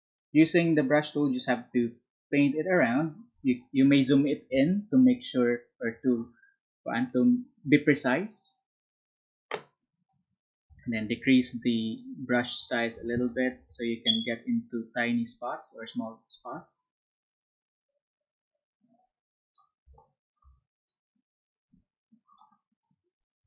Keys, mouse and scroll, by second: 16.4-23.4 drag, 21.9 space.